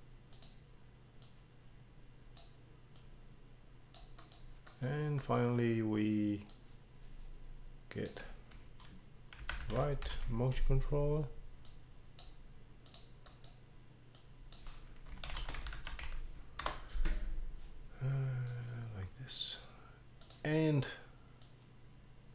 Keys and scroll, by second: 9.2-10.6 typing, 14.9-16.5 typing, 16.6 Return.